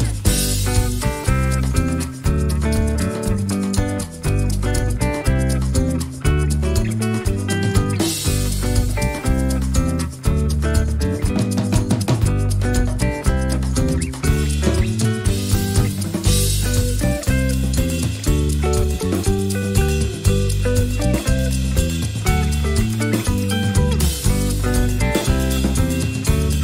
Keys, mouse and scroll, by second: 0.5 click, 1.6 ctrl+shift+click, 2.4 ctrl+shift+click, 3.4 click, 4.2 Delete, 5.5-9.4 drag, 6.2 space, 9.9 click, 11.5 ctrl+shift+9, 13.3-15.3 drag, 15.5 ctrl+scroll down 1, 16.0 ctrl+click, 17.4 click, 17.9 ctrl+scroll up 2, 18.7-20.1 ctrl+shift+drag, 20.5 ctrl+shift+click, 21.5-22.9 ctrl+shift+drag, 23.1-23.6 ctrl+shift+scroll down 3, 23.8 ctrl+click, 24.2 ctrl+click, 25.4-26.6 drag.